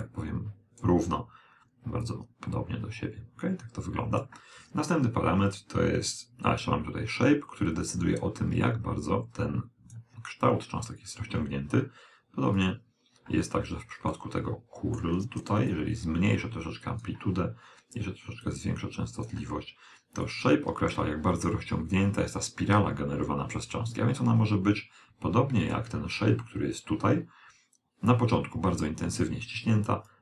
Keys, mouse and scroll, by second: 0.1 click, 2.1 click, 6.7 click, 12.6 click, 13.6-15.9 middle drag, 15.8 click, 18.5 click, 20.3 click, 30.1 click.